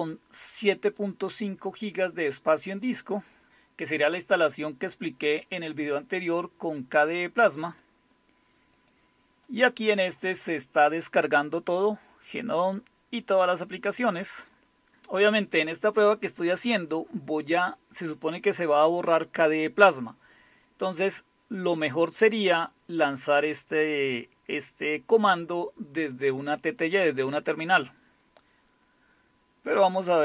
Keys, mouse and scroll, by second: 2.9 click, 8.8 click.